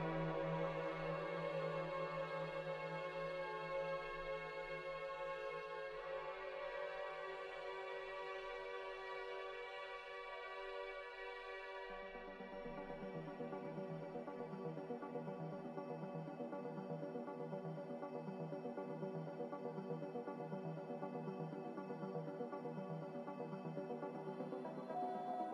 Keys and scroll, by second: 0.3 g, 4.7 z, 25.3 ctrl+z.